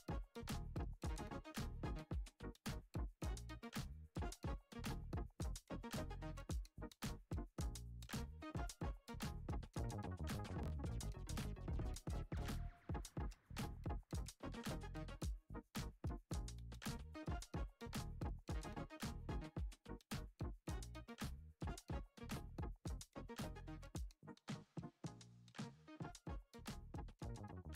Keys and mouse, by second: 1.2 g, 5.0 click, 5.4 alt+z, 5.7 click, 6.5-6.8 drag, 7.2-7.6 drag, 8.3 g, 11.1 middle click, 12.7 click, 13.1 middle click, 13.8 middle click, 15.1 click, 15.4-17.7 typing, 18.5 shift+middle click, 20.3 click, 21.1 shift+click, 22.9 shift+click, 23.2 shift+middle click, 24.2 shift+click, 25.3 shift+click, 25.9 shift+click, 27.2 shift+click.